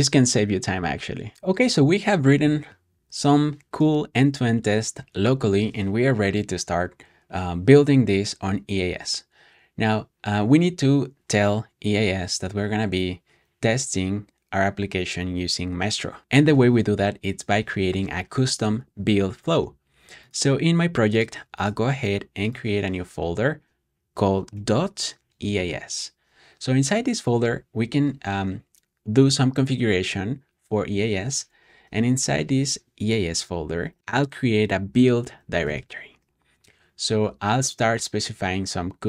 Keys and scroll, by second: 24.4-26.0 typing, 31.8 typing, 33.7-34.5 typing, 35.5 Return.